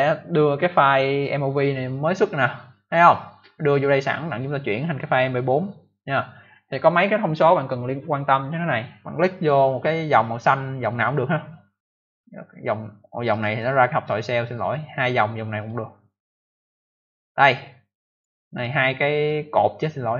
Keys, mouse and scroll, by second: 11.8 click, 13.2 click, 15.5 click, 15.6 click, 18.1 click, 18.1 click.